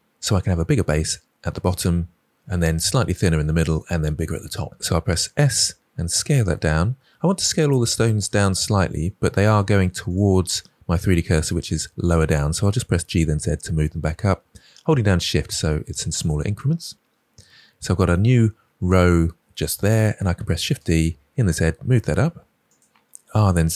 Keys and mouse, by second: 4.7 s, 10.0 click, 12.7 g, 13.0 z, 20.4 shift+d, 20.9 z, 23.2 r, 23.5 z.